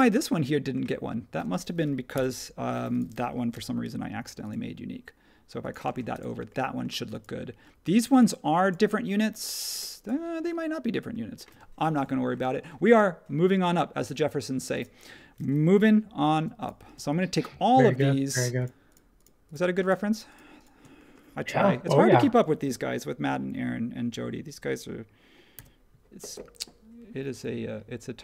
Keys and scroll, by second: 2.1 BackSpace, 3.5 m, 5.8 space, 25.5 super+g.